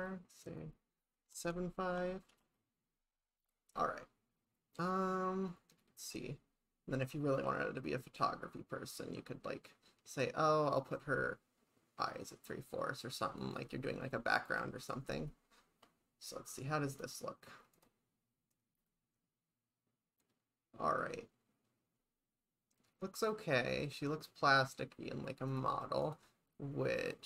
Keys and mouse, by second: 7.5 click, 8.6-13.7 drag, 14.5 click, 17.1 click, 25.6 click, 26.1 click, 27.0 click.